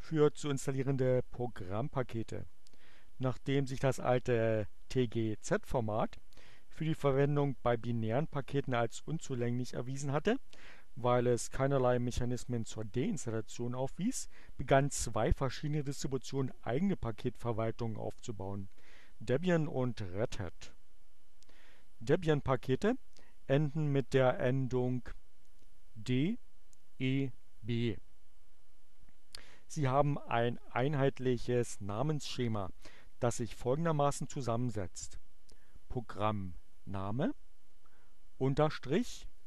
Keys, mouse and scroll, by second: 26.4 click, 36.0-37.2 drag, 37.3-38.4 drag, 39.3 click.